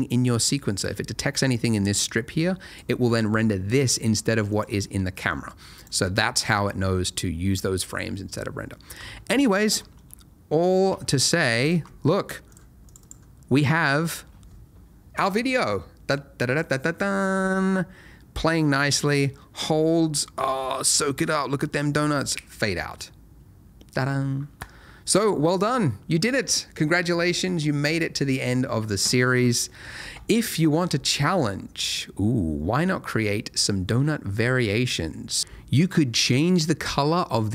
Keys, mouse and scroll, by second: 1.0 Escape, 1.9 click, 4.5 click, 5.7 click, 11.6 alt+click, 12.5 click, 12.8 double click, 30.0 space.